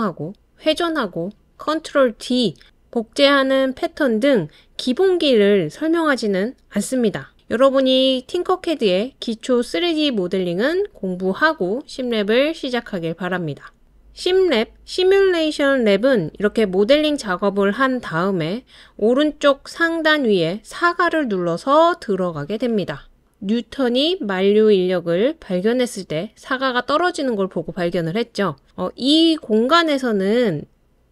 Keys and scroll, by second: 10.0 space, 11.7 space, 11.8 space, 27.8 space.